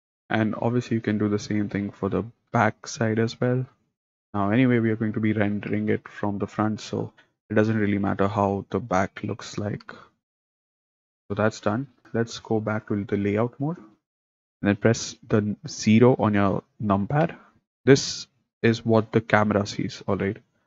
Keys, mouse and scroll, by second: 0.2 middle click, 0.8 click, 3.8 g, 6.7 s, 9.7 s, 10.5 s, 11.0 click, 11.1 middle click, 14.0 click, 17.2 KP_0.